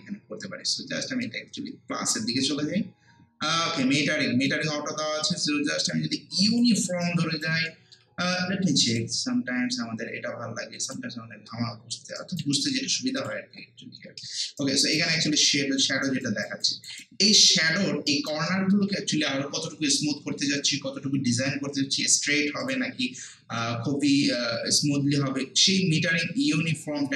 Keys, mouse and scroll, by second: 4.5-7.0 drag, 7.0 alt+right click, 7.7 alt+middle click, 8.9 click, 11.5 scroll down 1, 11.7 scroll up 1, 12.2 alt+right click, 12.6 alt+middle click, 13.2 click, 13.6 scroll down 1, 13.9 scroll up 1, 14.2 alt+middle click, 14.6 alt+right click, 15.0 alt+click, 16.2 alt+right click, 16.6 alt+click, 17.0 alt+right click, 17.6 alt+middle click, 18.1 alt+right click, 18.5 alt+middle click, 22.2 alt+middle click, 22.2 scroll down 1, 22.6 click, 26.5-27.1 drag.